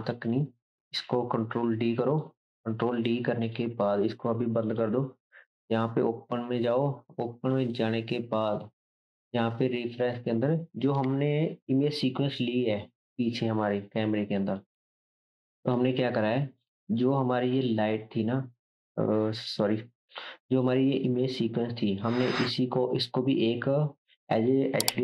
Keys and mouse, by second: 1.5 shift+d, 2.2-3.4 drag, 14.9 click, 15.7-16.8 drag, 17.1-19.7 drag, 20.1 ctrl+t, 20.5 click, 20.5 middle click, 21.9 click, 21.9 middle click, 23.0-25.0 drag, 23.0-25.0 middle drag.